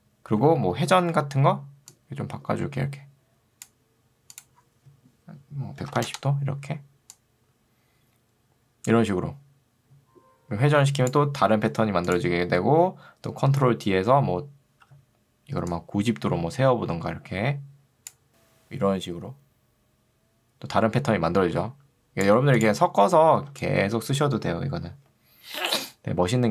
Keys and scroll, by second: 0.4 r, 6.0 0, 6.2 Return, 13.6 ctrl+d, 14.8 r, 23.4 ctrl+2.